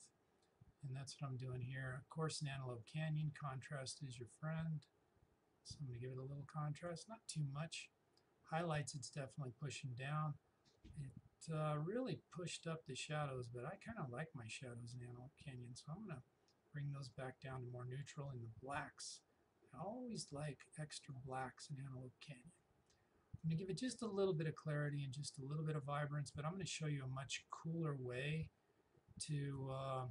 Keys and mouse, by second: 10.8-23.4 drag, 23.4-28.5 drag, 29.6-30.1 drag.